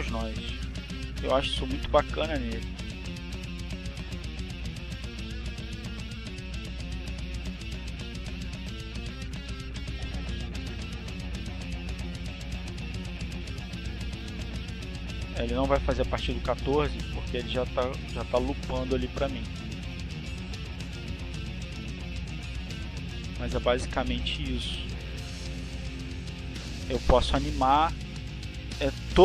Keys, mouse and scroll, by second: 0.1 click, 1.5-2.5 drag, 3.1 click, 4.3 click, 5.3 click, 6.5 click, 12.0-14.3 drag, 15.1 click, 16.6 click, 17.5 click, 18.3 click, 19.8-26.1 drag, 27.0 click, 27.8 click.